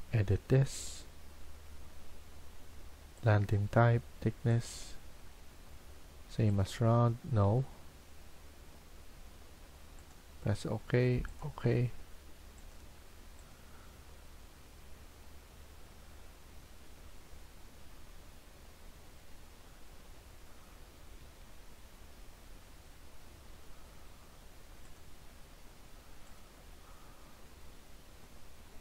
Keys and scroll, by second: 20.9 Escape, 21.1 Escape.